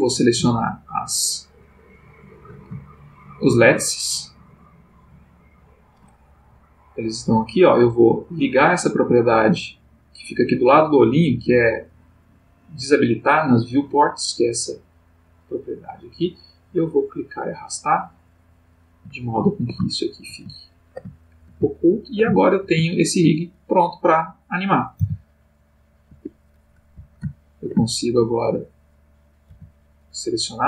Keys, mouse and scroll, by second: 0.6 shift+click, 1.5 shift+click, 2.9-4.1 shift+middle drag, 4.5 shift+click, 5.3 shift+click, 8.1 click, 15.3 click, 17.0-18.6 drag, 19.1-20.4 ctrl+middle drag, 20.8-23.4 ctrl+shift+middle drag, 24.3 click, 25.0 r, 26.1 Escape, 27.3-28.4 ctrl+middle drag, 28.7 click, 29.5 g.